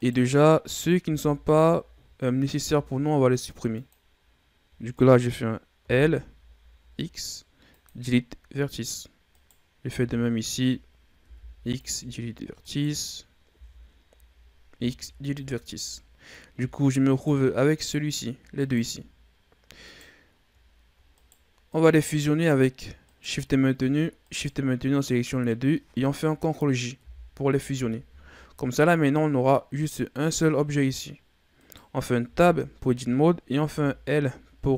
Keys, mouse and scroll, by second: 0.9 l, 2.4 Delete, 4.8 right click, 5.7 l, 6.7 Delete, 9.2 right click, 9.8 l, 11.0 x, 12.5 right click, 13.4 l, 14.6 x, 15.9-16.4 scroll down 5, 16.4 Tab, 17.0 right click, 17.6 right click, 18.5 shift+right click, 19.7 right click, 21.0 right drag, 21.6 right click, 22.1 right click, 23.0 right click, 24.1 shift+right click, 27.0 ctrl+j, 31.4 right click, 32.1 Tab, 33.5 a.